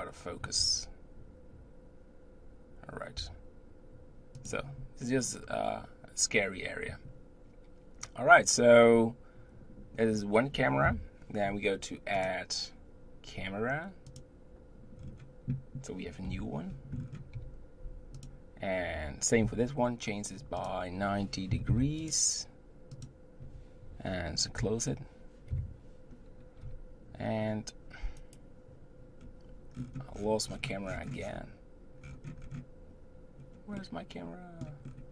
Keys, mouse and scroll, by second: 10.8 KP_7, 12.1-15.0 drag, 15.0-16.0 scroll down 4, 16.2 KP_3, 16.9-17.4 scroll up 4, 17.4 g, 19.4 n, 20.6-22.1 drag, 22.9 click, 25.5 KP_7, 26.6 g, 28.2-29.2 right drag, 29.2-29.7 scroll down 1, 29.7-31.1 scroll down 31, 31.1 scroll up 1, 32.0-33.4 scroll up 9, 33.4-33.8 scroll up 1, 33.8-34.8 middle drag, 34.8-35.1 scroll up 2.